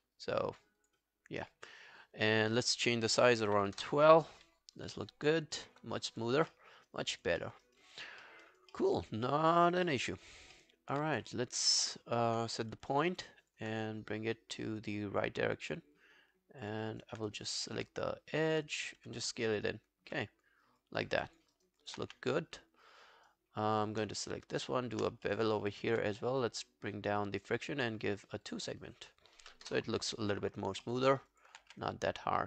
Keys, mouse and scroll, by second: 1.1-3.1 scroll down 1, 3.2-4.0 typing, 5.6 alt+middle click, 5.9 alt+scroll down 3, 6.2 alt+click, 6.5 alt+middle click, 6.8 alt+right click, 7.0 alt+click, 7.4 alt+middle click, 7.7 alt+right click, 7.9 alt+click, 8.2 alt+middle click, 8.5 alt+right click, 8.7 alt+middle click, 9.0 alt+right click, 9.3 alt+middle click, 9.5 alt+right click, 9.9 alt+middle click, 10.1 alt+right click, 10.6 alt+middle click, 11.7 alt+click, 12.2 alt+middle click, 12.6 f, 13.1 alt+scroll down 1, 13.3 alt+click, 16.8 alt+right click, 17.3 right click, 18.5 double click, 19.1 f, 21.0 scroll down 3, 21.3 alt+click, 21.5 alt+right click, 21.8 alt+click, 22.1 q, 22.3 right click, 24.0 double click, 24.2 shift+right click, 25.3 alt+middle click, 25.5 alt+right click, 25.7 alt+click, 29.7 Return, 30.9 alt+middle click, 31.1 alt+right click, 31.4 alt+click, 31.7 w, 31.9 right click.